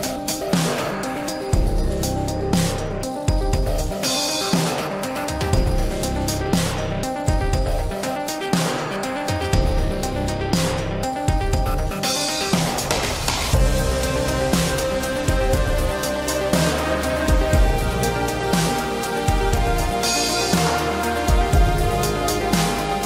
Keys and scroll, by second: 12.6 ctrl+z.